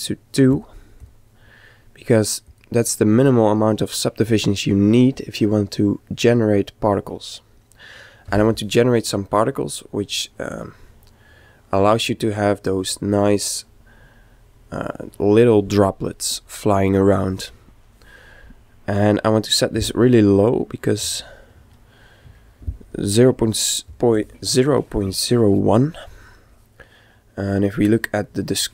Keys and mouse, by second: 0.4-4.3 drag, 10.5-12.3 middle drag, 19.2 click.